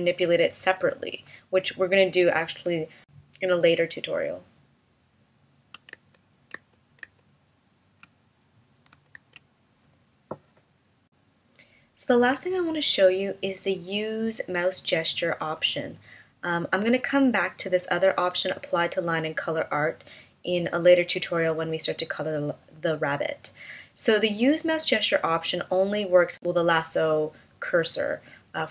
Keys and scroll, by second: 6.5 super+z, 9.7 super+z.